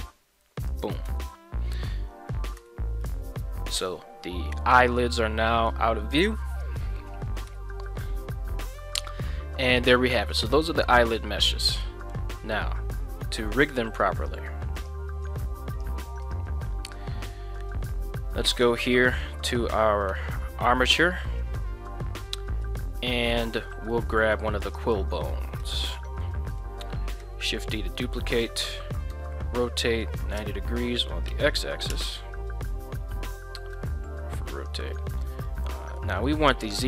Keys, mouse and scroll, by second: 0.7 click, 1.1 Tab, 3.0-3.7 middle drag, 4.7-5.0 middle drag, 5.5 middle click, 7.5 KP_1, 14.2 click, 14.8 click, 15.8 click, 16.3 click, 18.5 right click, 20.1 Tab, 20.8 middle click, 22.0 middle click, 22.6 middle click, 23.9 middle click, 24.8 right click, 25.6 KP_3, 27.2 shift+d, 28.3 click, 29.1 r, 30.1 KP_9, 30.4 KP_0, 31.3 KP_Subtract, 31.9 KP_Enter, 32.7 shift+middle click, 33.7 r, 34.5 click, 34.9-36.0 middle drag, 36.2 middle click.